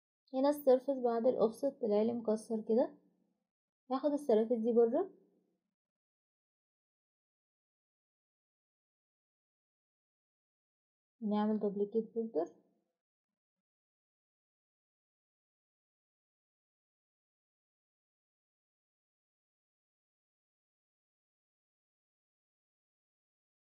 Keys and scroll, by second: 1.7-2.4 typing, 8.8-10.8 typing, 22.0 Escape, 22.9 Delete, 23.2 Delete.